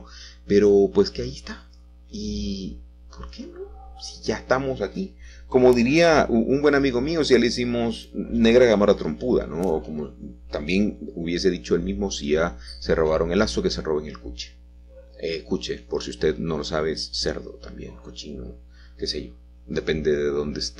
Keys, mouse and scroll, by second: 0.8 y, 6.0 click, 6.0 right click, 6.0 g, 6.4 z, 9.7 g, 10.4 y, 12.6 g, 17.4 ctrl+middle click.